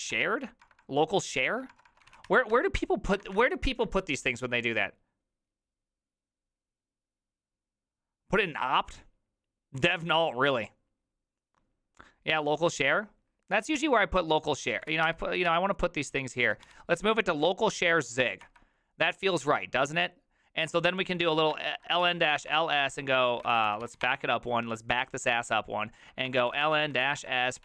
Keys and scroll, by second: 0.0-2.6 typing, 3.2 alt++, 13.8 alt+{, 14.6-18.9 typing, 15.5 Tab, 21.2-24.3 typing, 23.4 ctrl+c, 23.5 ctrl+c, 25.8-27.6 typing.